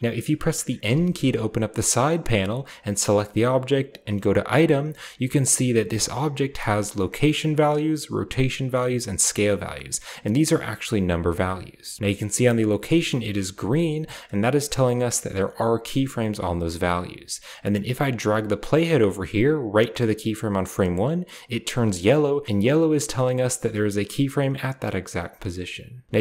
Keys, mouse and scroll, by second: 0.7 n, 4.3 click, 9.6-10.9 drag, 10.9 middle click, 18.0-19.9 drag, 26.1 ctrl+b.